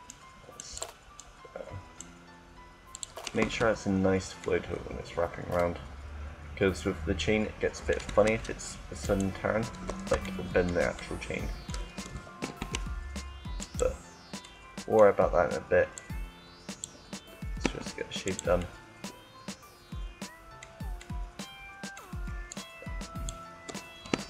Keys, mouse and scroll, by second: 0.2-2.9 right drag, 3.0 Tab, 8.1 Tab, 8.7-10.2 right drag, 12.4 e, 14.2 middle click, 15.6-17.4 drag, 17.6 e, 18.3 click, 18.5 middle click, 18.6 click, 18.7 middle click, 18.9 click, 19.1 middle click, 19.2 click, 19.3 middle click, 19.4 click, 20.0 middle click, 20.9 middle click, 22.3-24.0 drag, 23.8 e.